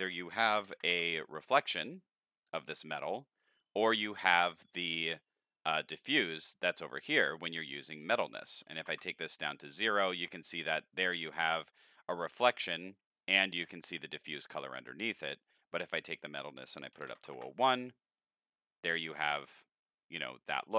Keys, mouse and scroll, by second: 8.2 click, 16.2 click, 17.4 KP_Enter, 17.4 KP_0, 20.2 click.